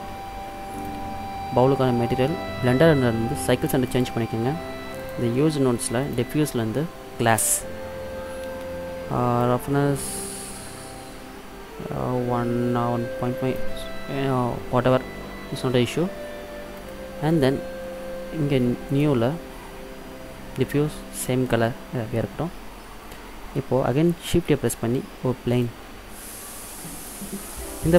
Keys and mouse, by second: 0.9-2.6 drag, 5.1-11.4 drag, 16.9-18.9 middle drag, 19.1-22.2 drag, 24.4 shift+a, 27.1-27.8 middle drag.